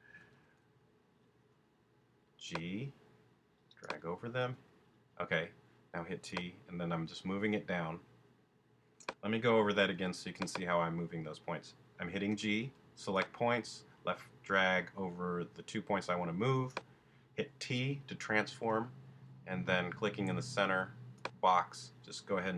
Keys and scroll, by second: 0.3 super+g, 4.5 t, 9.5 shift+super+z, 10.0 super+z, 12.3 g, 18.7 t.